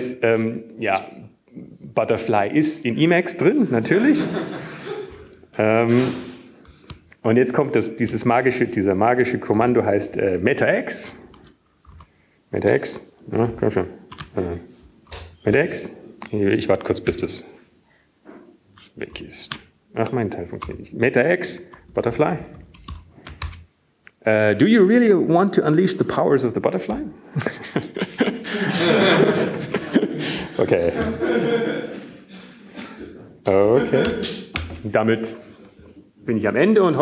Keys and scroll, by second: 8.0 super+Left, 10.0 super+e, 12.6 super+Right, 13.2 super+q, 15.8 super+Left, 16.9 ctrl+g, 19.8 alt+x, 23.0 ctrl+g, 24.9 alt+x, 25.8-27.1 typing, 27.5 Return, 30.6 y.